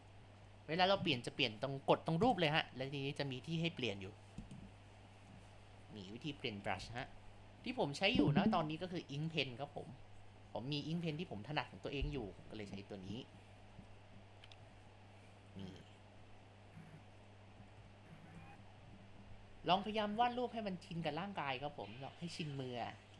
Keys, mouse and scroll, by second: 0.7 ctrl+z, 2.2-5.2 drag, 5.4-6.6 drag, 6.8 ctrl+z, 7.1-12.1 drag, 12.1 ctrl+z, 12.4-14.0 drag, 14.6 ctrl+z, 14.9-17.7 drag, 17.7 ctrl+2, 17.9 click, 19.5 click, 19.9 ctrl+z, 20.3-23.1 drag.